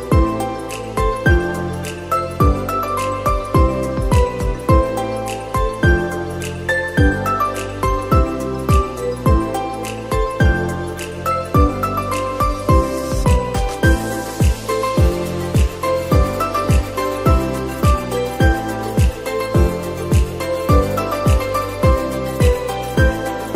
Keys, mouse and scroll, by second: 5.9-6.7 scroll up 1, 6.7-9.3 shift+middle drag, 9.3 click, 11.3 click, 12.2-17.0 drag, 17.3-20.4 drag, 23.4 click.